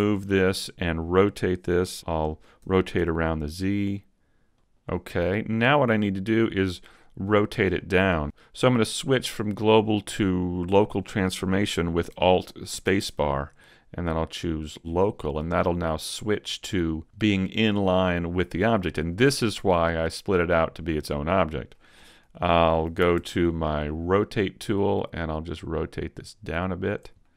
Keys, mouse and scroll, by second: 0.2 middle click, 2.6 r, 4.2 middle click, 4.6 click, 5.2-5.5 scroll up 3, 5.7 middle click, 7.8 middle click, 12.7 alt+space, 15.4 middle click, 21.4 middle click, 23.1 ctrl+alt+Down, 25.1 click, 27.2 middle click.